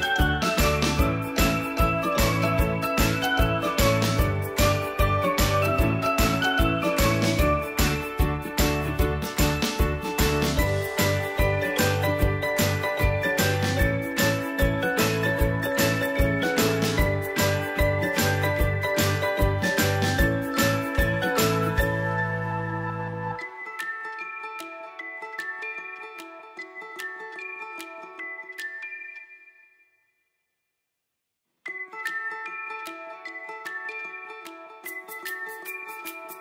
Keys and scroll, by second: 13.9 End, 27.2 End, 31.8 ctrl+a.